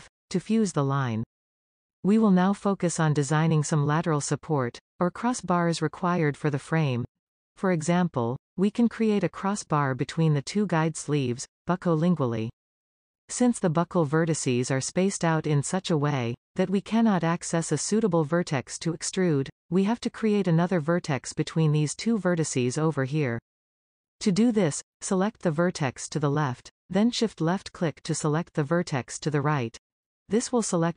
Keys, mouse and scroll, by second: 1.0 f, 2.1-4.0 scroll down 5, 4.0-7.6 middle drag, 7.6-8.9 scroll up 1, 8.9-12.3 middle drag, 25.8 click, 27.3 shift+click.